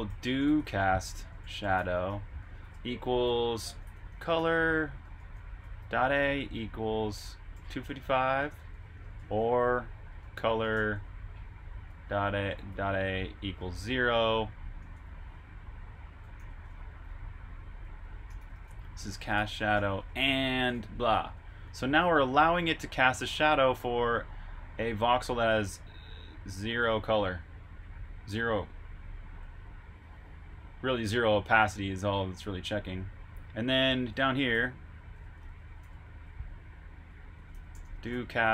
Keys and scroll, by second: 7.2-12.7 typing, 14.8 typing, 15.9-17.8 typing, 22.3 typing, 29.3 j, 31.5 typing, 33.0-34.7 typing.